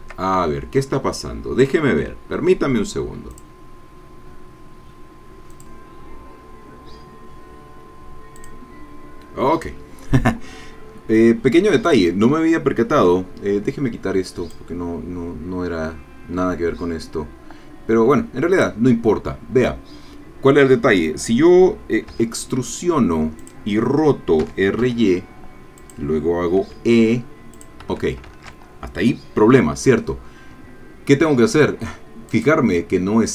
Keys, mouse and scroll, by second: 3.4 click, 5.5 click, 8.4 click, 11.8 click, 14.5-18.8 drag, 22.1 e, 23.4 click, 24.4 r, 24.8 y, 25.8 click, 26.6 e, 27.5 click, 27.8 Escape, 28.3 ctrl+z, 32.3 click.